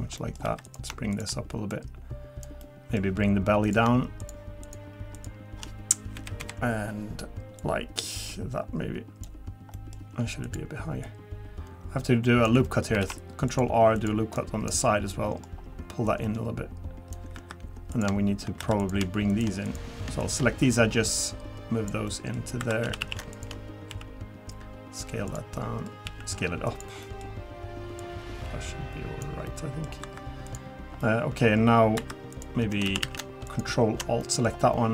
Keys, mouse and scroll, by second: 0.2 middle click, 0.4 3, 0.6 click, 1.1 shift+click, 1.7 click, 2.6 middle click, 3.6 click, 4.2 shift+click, 4.6 shift+click, 6.1 KP_1, 6.4 KP_3, 7.6 click, 9.7 middle click, 10.4 click, 11.0 click, 12.6 middle click, 13.0 ctrl+r, 14.3 right click, 15.5 scroll up 1, 16.0 click, 17.3 3, 17.9 click, 18.6 2, 18.8 click, 19.3 shift+click, 19.6 click, 20.2 shift+click, 20.7 click, 22.1 middle click, 22.6 2, 22.8 a, 23.0 a, 23.3 click, 23.9 s, 25.6 middle click, 26.0 s, 27.0 middle click, 27.3-28.0 scroll down 1, 28.0 click, 29.5 middle click, 30.0 2, 30.4 click, 31.0 middle click, 31.4 scroll up 2, 32.0-32.3 scroll up 1, 32.0 2, 32.3 click, 32.9 a, 33.0 a, 33.5 alt+shift+click, 34.2 middle click.